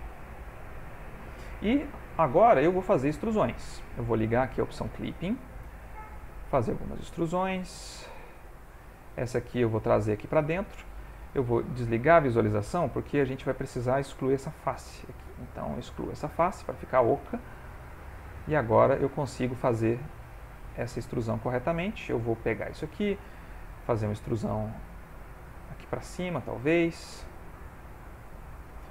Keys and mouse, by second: 1.7 click, 3.0 e, 4.7 click, 5.4 ctrl+middle click, 6.0 shift+middle click, 6.3 ctrl+middle click, 6.8 middle click, 7.7 e, 9.0 click, 9.6 e, 12.7 click, 12.8 middle click, 14.6 x, 17.7 middle click, 17.9 click, 18.4 middle click, 19.9 middle click, 21.2 click, 21.7 shift+click, 23.2 e, 26.7 middle click, 27.7 middle click, 28.4 click, 28.7 e.